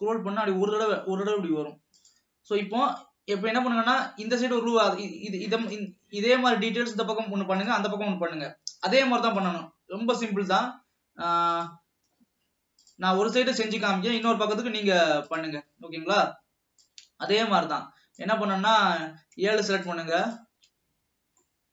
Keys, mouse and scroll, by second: 3.4 alt+a, 3.8 alt+a, 9.7 Left, 12.1 Left, 17.0 click, 20.5 shift+click, 20.8 shift+click, 21.5-21.7 middle drag.